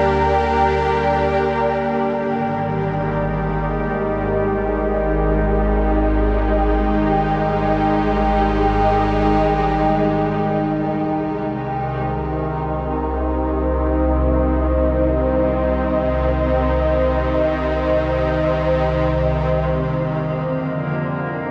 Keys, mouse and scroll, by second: 0.7 click, 4.3-7.0 drag, 7.0 ctrl+z, 7.8 click, 9.7 shift+Right, 13.5-14.9 typing, 13.9 click, 14.1 click, 14.7 click, 15.0 click, 20.2 scroll down 1.